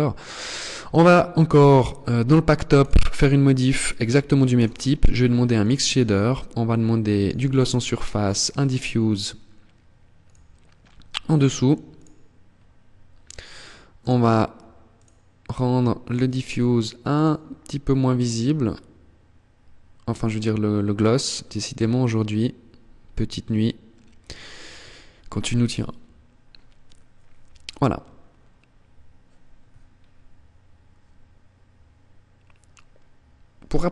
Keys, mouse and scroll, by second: 0.4 click, 1.3 click, 4.5 click, 9.3 click, 13.1 click, 13.7 click, 14.9 click, 16.1 click, 26.9 scroll down 4, 28.7 scroll down 3, 29.5 scroll down 6.